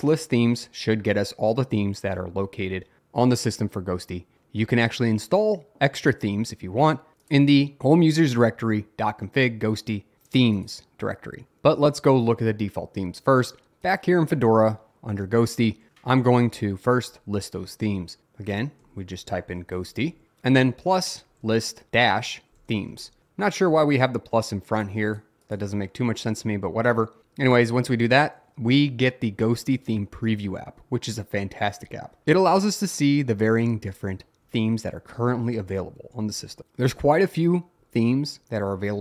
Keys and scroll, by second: 13.6 Return, 18.7-23.5 typing, 27.2 Return, 33.3 Down, 33.8 Down, 38.4 Up, 38.4 Down, 38.5 Down.